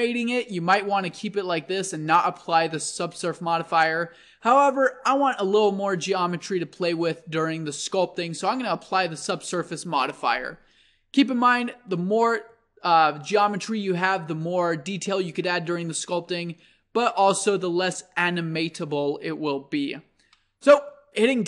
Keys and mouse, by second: 11.7-20.5 middle drag, 20.7 click, 20.9-21.4 middle drag.